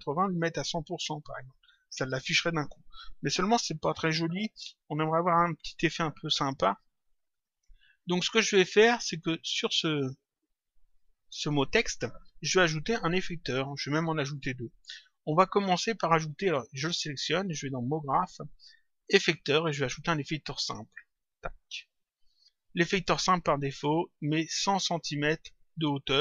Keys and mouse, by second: 7.2 click, 9.5 click, 18.0 click, 21.2 click.